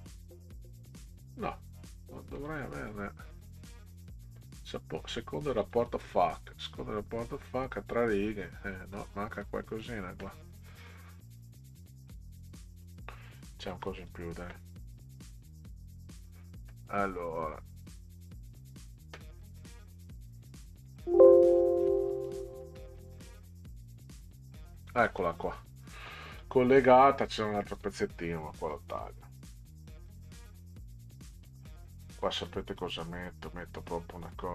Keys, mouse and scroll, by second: 2.3 click, 5.1 click, 5.6 click, 7.9 click, 10.8 click, 11.4 click, 12.1 click, 13.7 Delete, 14.0 click, 18.3 click, 20.9 click, 22.3 click, 22.8 middle click, 23.3 click, 25.0 middle click, 27.3 click, 27.5 click, 28.7 click, 29.5 Delete, 31.5 click, 32.3 Delete.